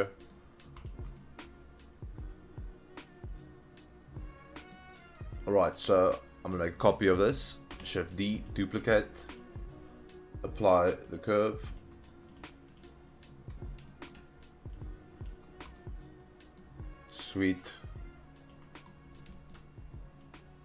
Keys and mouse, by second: 1.2-4.7 middle drag, 5.2-5.6 middle drag, 6.0 click, 6.5 middle click, 7.7 shift+d, 8.4 shift+click, 9.3 click, 11.1-11.8 drag, 13.9 shift+middle drag, 14.7-15.2 drag, 15.7-16.6 middle drag, 17.4-18.5 drag, 18.9-19.2 middle drag, 19.3 shift+middle drag, 20.2-20.6 drag.